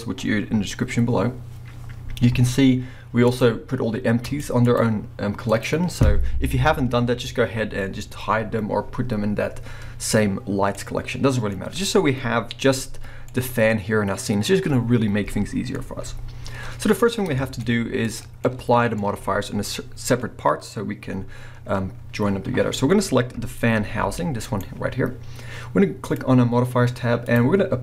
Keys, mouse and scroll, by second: 3.3 click, 4.3 click, 4.7 click, 5.5 click, 6.0-6.9 scroll down 2, 10.8-14.7 middle drag, 11.5 scroll up 1, 13.1 scroll down 1, 15.2-18.1 middle drag, 15.9-16.8 scroll up 2, 16.8-17.4 scroll up 1, 17.6-18.1 scroll up 2, 18.1 click, 18.4-24.6 middle drag, 23.8 g, 24.6 right click, 26.0 click, 27.3 click.